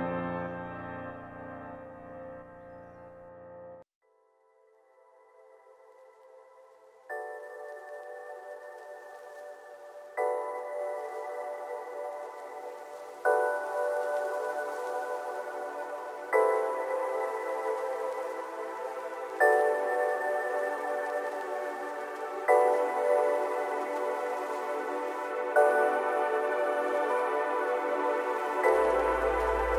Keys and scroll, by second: 1.1 ctrl+KP_0, 2.2 ctrl+alt+shift+e, 2.5 ctrl+alt+shift+a, 3.6 alt+e, 4.0 Escape, 5.0 ctrl+shift+e, 5.2 ctrl+shift+a, 17.8 Return, 19.0 F6, 21.1 KP_2, 21.3 Return, 28.3 F6.